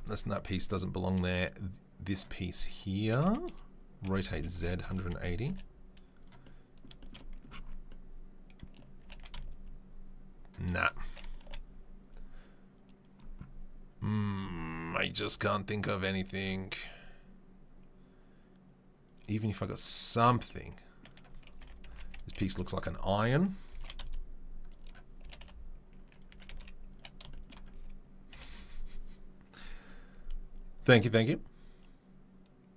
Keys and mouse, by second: 2.2-8.8 middle drag, 4.0 r, 5.4 g, 8.8 g, 11.4 Delete, 19.0-20.2 drag, 21.6 r, 23.7 g, 25.2 g, 26.3 s, 27.5-32.7 middle drag, 28.3 KP_7.